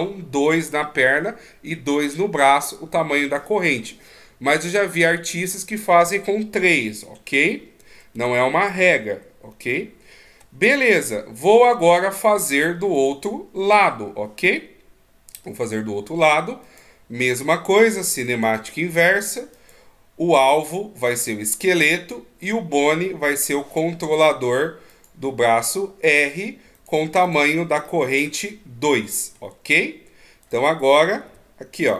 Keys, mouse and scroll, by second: 10.0 alt+g, 11.3 middle click, 13.3 right click, 14.8 middle click, 17.0 click, 27.2 click, 28.2 middle click, 30.8 right click, 31.6 g.